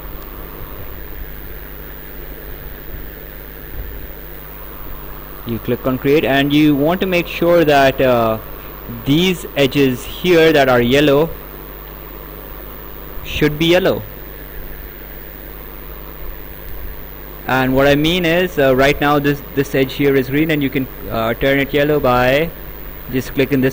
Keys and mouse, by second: 1.6 click, 3.7 click, 5.5 click, 12.0 click, 13.9 right click, 16.5 click, 21.5 click.